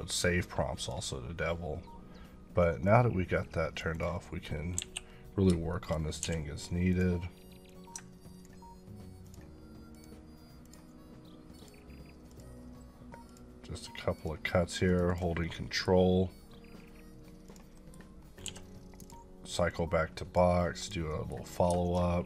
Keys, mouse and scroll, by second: 3.9 double click, 4.7 KP_1, 5.7 shift+middle click, 6.2 d, 6.9 click, 9.2 ctrl+click, 9.9 ctrl+double click, 10.6 ctrl+click, 11.6 ctrl+click, 12.3 ctrl+double click, 13.3 ctrl+click, 14.1 ctrl+click, 14.8 ctrl+double click, 15.1 ctrl+click, 15.4 middle click, 17.4 click, 17.7 middle click, 18.2 scroll up 2, 18.4 d, 19.0 click, 21.1 middle click, 21.8 shift+middle click.